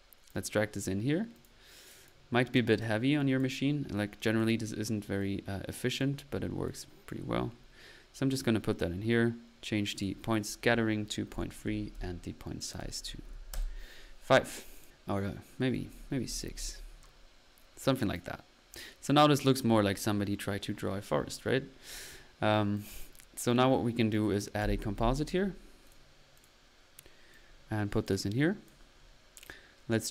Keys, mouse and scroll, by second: 1.5 click, 2.1-2.5 drag, 3.0 click, 3.4 drag, 4.2-4.6 drag, 5.2 click, 5.7-6.5 typing, 6.0 click, 6.7-7.5 drag, 7.5-9.0 middle drag, 9.9 click, 10.0-10.7 typing, 10.2 click, 14.7 click, 15.7 click, 16.8 middle click, 17.9 click, 21.9 click, 22.7 click, 24.1 right click, 24.6-24.9 typing, 25.9 click, 26.4 drag, 26.9-27.3 drag, 28.1-28.8 typing, 28.1 click, 28.7 click, 29.1 middle click.